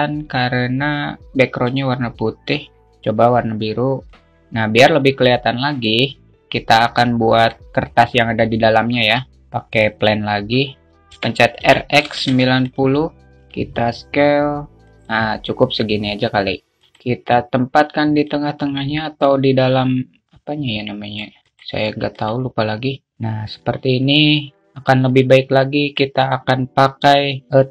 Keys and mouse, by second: 2.2 click, 9.4 shift+a, 11.7 r, 13.9 s, 14.8 click, 18.8-21.8 drag, 23.3 click, 24.6 alt+middle click, 25.8 click, 26.0 alt+middle click.